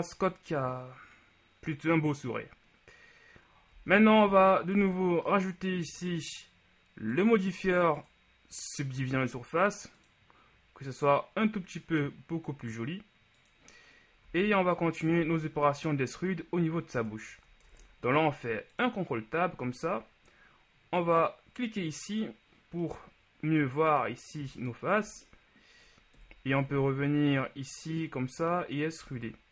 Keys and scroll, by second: 3.9 z, 4.9 Tab, 14.5 z, 17.7 Tab, 26.3 KP_1, 26.6 z, 29.2 z.